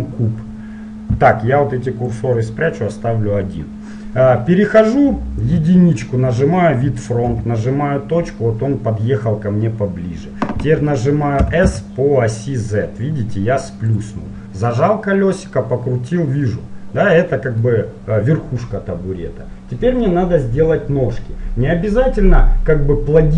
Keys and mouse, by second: 2.3-4.1 drag, 5.7 KP_1, 7.4 KP_Decimal, 11.6 s, 15.0-16.9 middle drag.